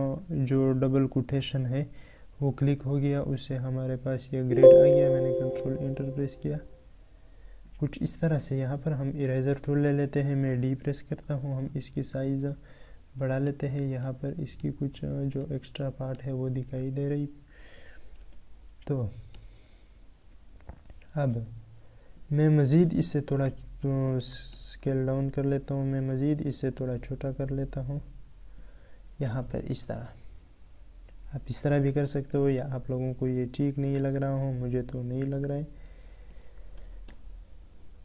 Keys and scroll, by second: 2.6 ctrl+Return, 22.6 ctrl+t, 32.2 ctrl+t.